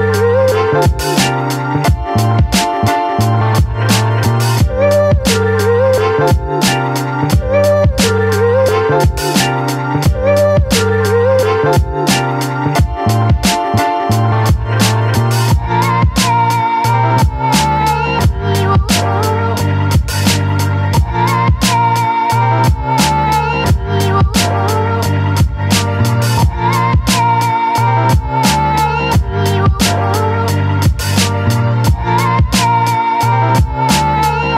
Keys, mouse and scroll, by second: 7.5 click, 9.2 click, 15.6 Left, 15.7-17.7 drag, 17.7 right click, 18.2 click, 19.7 click, 21.1 click, 22.6-25.6 drag, 25.8-27.9 drag, 27.9 right click, 28.8-34.1 drag, 34.1-34.5 drag.